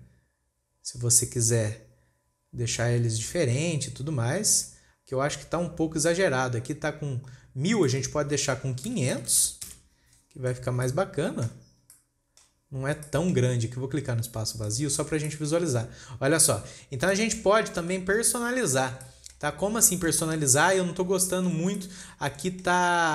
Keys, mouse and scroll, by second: 5.4-6.5 scroll up 4, 6.5-8.2 scroll up 1, 8.2-9.8 drag, 9.8 KP_0, 11.0-11.3 scroll down 3, 11.3-13.1 shift+middle drag, 13.1-13.6 scroll down 2, 13.6-15.1 shift+middle drag, 15.1 click, 15.5 scroll down 3, 15.7-16.1 shift+middle drag, 16.1-16.7 scroll up 8, 17.1-17.6 scroll down 5, 17.6-20.0 shift+middle drag, 20.0-20.3 scroll down 4, 20.3-20.7 shift+middle drag, 20.7-21.5 scroll up 3, 21.5 scroll up 1, 21.6-23.1 shift+middle drag.